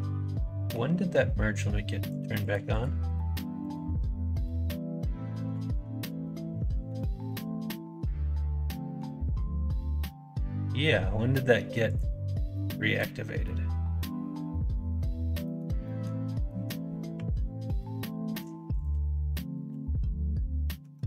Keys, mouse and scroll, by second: 2.0 click, 2.3 click, 2.6 click, 3.0 click, 3.5 click, 4.3 click, 5.2 middle click, 5.5 ctrl+z, 5.7 ctrl+z, 5.9 ctrl+z, 6.1 ctrl+z, 6.5 middle click, 7.2-8.9 middle drag, 11.8 click, 12.5 middle click, 13.4-14.9 middle drag, 15.4 middle click, 15.8 middle click, 16.2 middle click, 17.1 2, 18.9 middle click, 19.6 f.